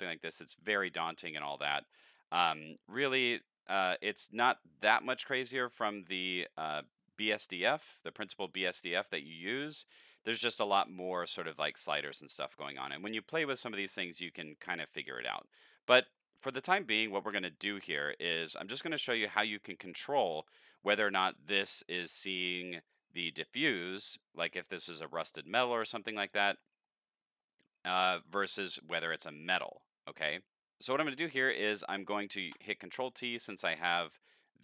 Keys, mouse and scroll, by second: 4.0 click, 5.8-6.5 drag, 7.9 click, 16.1 middle click, 16.6 middle click, 17.0 middle click, 17.4 middle click, 17.8 middle click, 18.3 middle click, 26.6 middle click, 30.4 middle click, 30.4 click, 31.5-32.1 drag, 32.6 ctrl+t, 33.1 middle click, 33.5-34.0 scroll down 10, 34.3 click.